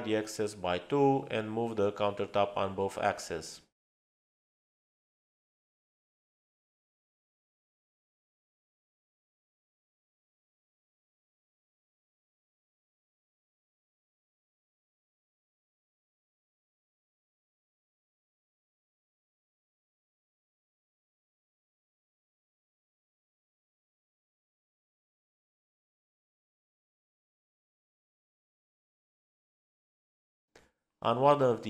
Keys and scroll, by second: 3.6 space, 6.4 m, 8.0 Return, 9.5-10.2 typing, 12.1-13.4 typing.